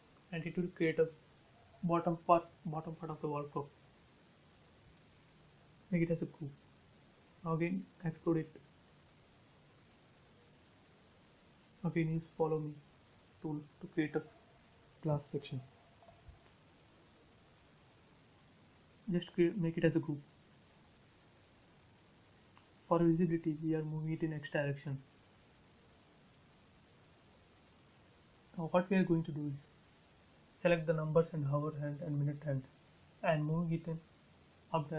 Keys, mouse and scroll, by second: 1.5 scroll up 1, 4.4 click, 5.0 right click, 5.8 click, 6.4-7.3 scroll up 2, 7.3 click, 7.8 right click, 8.7 click, 9.3-10.3 scroll down 1, 11.3 click, 13.1-13.8 scroll up 1, 14.9 click, 16.1 space, 16.2 scroll down 1, 17.6 click, 18.7 right click, 19.8 click, 20.2-21.0 scroll down 1, 22.1 m, 22.2 click, 23.5 Right, 25.6 1, 25.9 Return, 26.3 space, 26.8 click, 26.9 click, 27.3 scroll up 1, 28.0 click, 28.8-29.2 scroll up 1, 30.0 click, 30.1 click, 31.0 Delete, 31.7 click, 31.7 click, 32.3-32.8 scroll down 1.